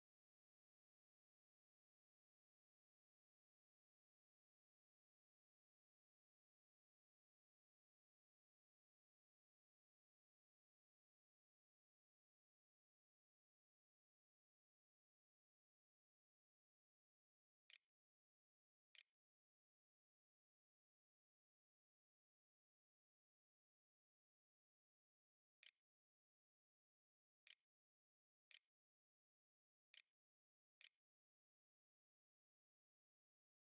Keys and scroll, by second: 8.2 Escape, 18.8 ctrl+v, 24.7-27.4 typing, 27.7 Delete, 27.8 Return, 28.7 shift+Return, 28.8-30.2 typing, 30.6 Return, 32.2-33.1 typing.